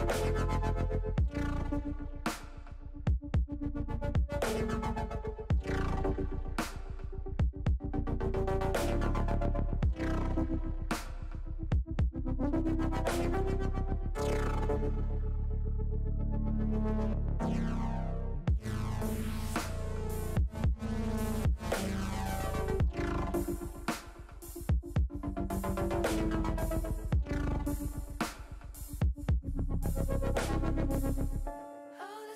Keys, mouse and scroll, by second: 1.1 click, 8.9-10.2 drag, 12.3 click, 13.0-14.9 drag, 15.8-17.0 drag, 17.3 click, 21.2-23.8 drag, 25.0-27.6 drag.